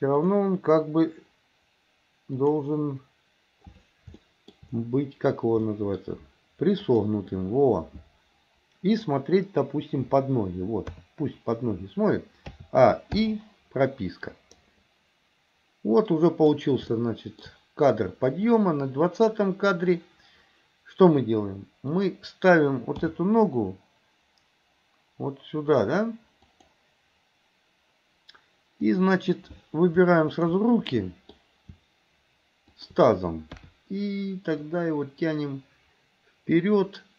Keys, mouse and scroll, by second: 0.2 click, 2.4 click, 4.2 shift+middle click, 5.7 shift+middle click, 6.9 click, 10.9 KP_3, 12.6 a, 13.2 i, 14.7-16.6 drag, 16.9 shift+middle click, 18.6 click, 21.9 click, 23.0 g, 28.9 click, 30.4 shift+click, 30.9 middle click, 32.7 shift+click, 33.6 KP_3, 34.6 click, 34.9-37.1 drag.